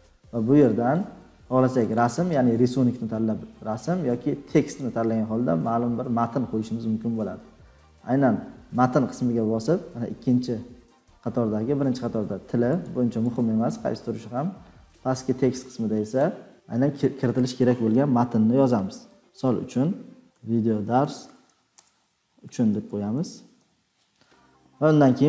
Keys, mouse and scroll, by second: 5.4 click, 16.1 click.